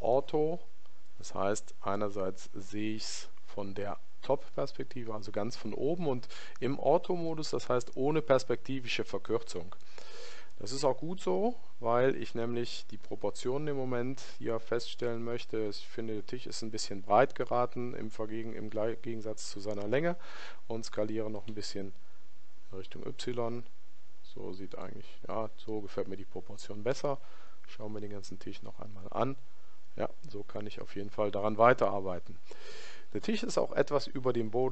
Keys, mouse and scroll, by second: 9.3-11.3 middle drag, 11.9-20.5 middle drag, 20.5 s, 27.0-28.9 middle drag, 33.3-34.7 middle drag.